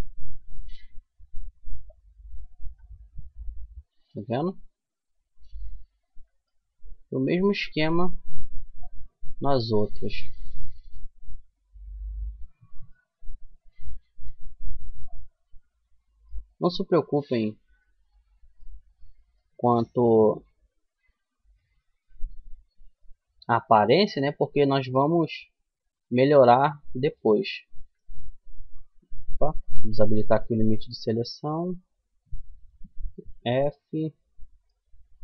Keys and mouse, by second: 1.2-2.7 middle drag, 3.2 middle click, 7.2-11.7 middle drag, 13.1-14.8 middle drag, 16.5 f, 17.1-18.9 middle drag, 20.1-22.9 middle drag, 23.9 middle click, 24.4-27.2 middle drag, 27.2-30.6 drag, 30.6 middle click, 31.0-32.7 right drag, 32.7 f, 33.8-35.0 middle drag, 35.0-35.2 right drag.